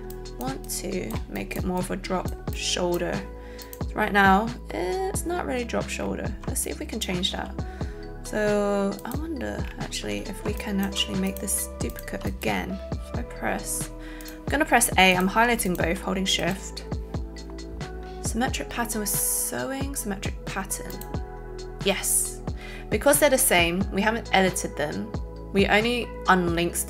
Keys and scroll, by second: 7.2 alt+z, 10.4 alt+a, 11.5 alt+shift+a.